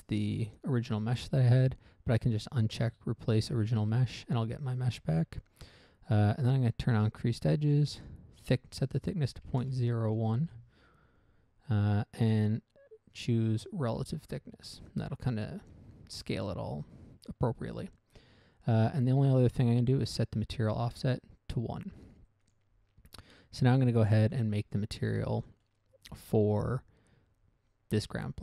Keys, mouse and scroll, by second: 2.9 click, 5.4 scroll up 1, 7.3 click, 8.4 click, 10.0 typing, 10.8 Return, 14.2 click, 15.3 scroll down 1, 15.7 middle click, 16.0 middle click, 16.6 scroll up 1, 17.0 scroll down 1, 17.4 middle click, 17.7 middle click, 21.3 click, 22.8 click, 24.2 click, 25.7 middle click, 26.1 middle click.